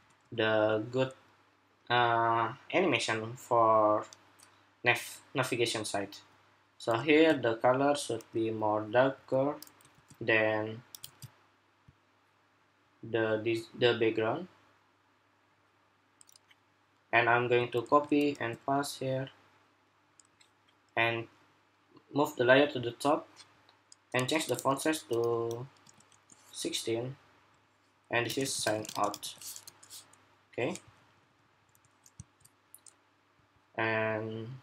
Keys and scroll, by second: 6.9 ctrl+c, 10.9 ctrl+c, 17.6 super+c, 18.1 super+v, 29.4 Escape.